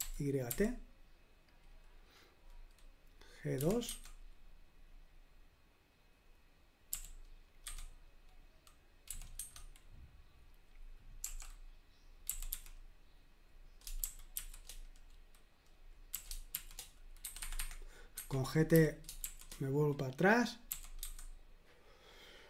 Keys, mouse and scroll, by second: 0.0-0.5 typing, 3.6 typing, 6.9 g, 7.6 2, 9.1 typing, 11.2-13.0 typing, 14.1 shift+g, 16.1-16.5 typing, 17.3 Escape, 17.4 Escape, 17.6 Escape, 18.1 Escape, 18.7 g, 21.0 typing.